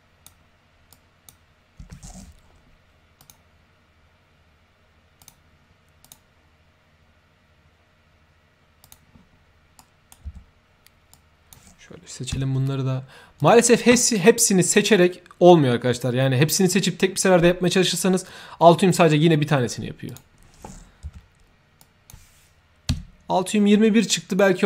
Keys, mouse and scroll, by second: 0.9-1.2 drag, 1.8 Tab, 3.1 click, 5.1 click, 6.0 click, 8.8 click, 9.7-10.0 right drag, 11.1-11.4 drag, 13.3 click, 14.6 click, 20.0 click, 21.8 drag, 23.1 Tab, 24.3 click.